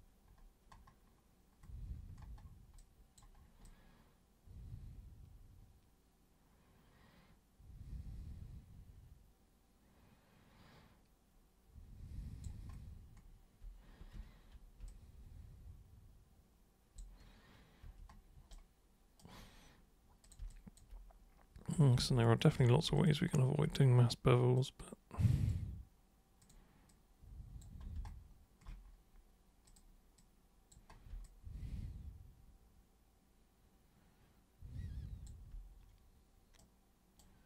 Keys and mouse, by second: 2.8-3.2 alt+super+drag, 3.6-12.4 alt+super+drag, 14.1 super+3, 14.8-17.0 alt+drag, 17.8 1, 18.5 right click, 20.2 click, 20.5 alt+super+click, 22.6 super+w, 23.0 alt+super+click, 24.6 super+click, 26.4 super+click, 26.9 super+click, 29.6 super+click, 30.1 super+click, 31.2-35.2 alt+super+drag, 36.6 super+right click.